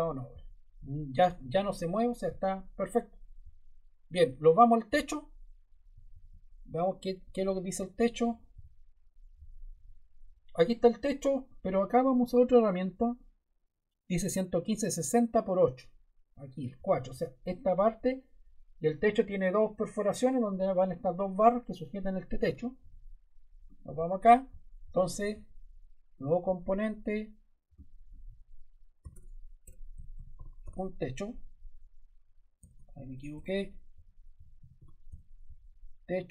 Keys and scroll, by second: 28.9-31.2 typing, 32.5 BackSpace, 34.0-35.5 typing.